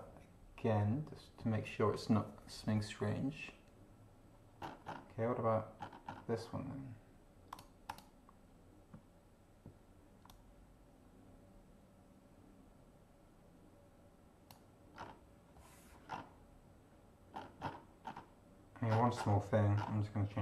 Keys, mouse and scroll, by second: 4.7-5.1 scroll up 2, 5.8 scroll up 2, 7.5 click, 7.9 click, 10.3-14.7 drag, 15.0 scroll down 2, 16.1 scroll down 2, 17.3-18.3 scroll up 6, 18.9-19.4 scroll down 2, 19.7 scroll down 2.